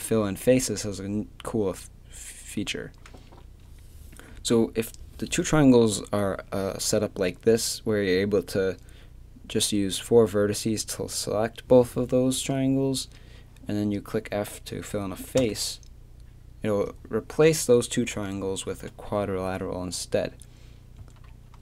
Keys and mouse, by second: 15.4 f, 20.1 middle click, 21.0 a, 21.3 middle click.